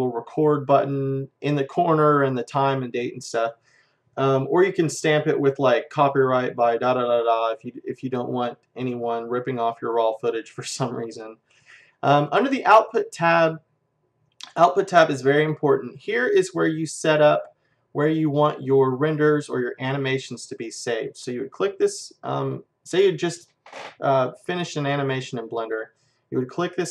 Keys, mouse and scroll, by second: 11.1-14.2 drag, 26.8 click.